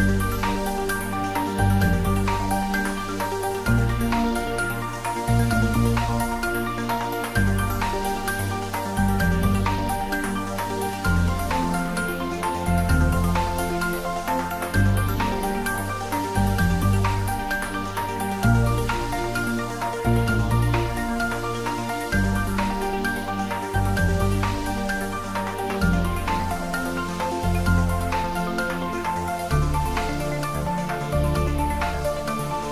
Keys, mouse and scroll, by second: 0.1 click, 0.6-2.1 middle drag, 2.1 ctrl+r, 3.7-5.2 scroll up 1, 5.2 click, 6.8 ctrl+z, 8.0-11.3 drag, 11.3-11.7 scroll down 1, 13.2 3, 14.6 click, 15.8-16.4 scroll up 1, 17.3 ctrl+r, 18.1-18.8 scroll up 1, 18.8 scroll up 1, 19.0 click, 21.0 ctrl+z, 22.2 ctrl+r, 22.7 click, 23.4 click, 23.7 ctrl+z, 24.5 ctrl+r, 24.7-26.5 ctrl+scroll up 1, 26.5 scroll up 1, 26.6-28.0 scroll down 1, 28.0-28.7 scroll up 1, 28.7-29.5 scroll down 1, 31.7 click, 31.9 s.